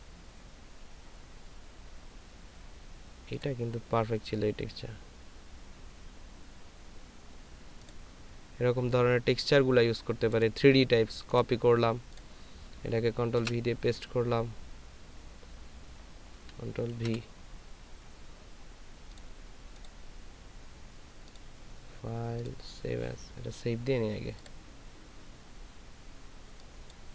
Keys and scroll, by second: 13.4 ctrl+v.